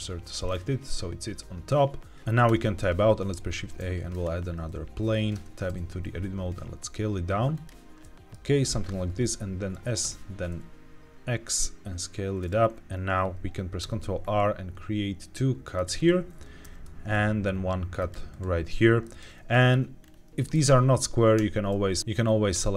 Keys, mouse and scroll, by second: 3.1 shift+a, 5.3 Tab, 5.6 s, 7.4 click, 7.8-8.2 scroll up 2, 7.9 middle click, 9.6 s, 9.9 x, 12.3-13.7 drag, 13.7 ctrl+r, 15.9 right click, 16.5 ctrl+r, 18.2 right click, 18.9 middle click, 19.4 shift+middle click, 19.9 scroll up 2, 20.3 shift+middle click, 21.3 a, 22.0 ctrl+z, 22.0-22.4 scroll down 1, 22.4 a.